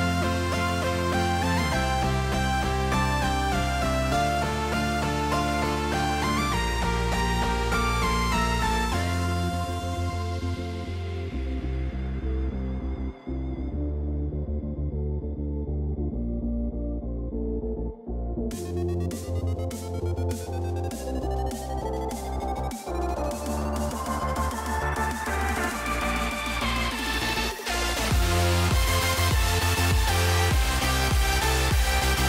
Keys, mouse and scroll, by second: 4.6 shift+middle click, 4.9 ctrl+s, 6.6 right click, 7.2 shift+middle drag, 9.6 click, 11.2-12.6 drag, 13.9 n, 14.7 click, 15.9 shift+middle click, 16.5 KP_0, 16.8 KP_0, 18.0-18.4 shift+middle drag, 19.7 click, 21.3 click, 23.3 y, 24.5 ctrl+z, 25.2 space, 26.3 space, 28.3 t, 29.6 shift+middle click.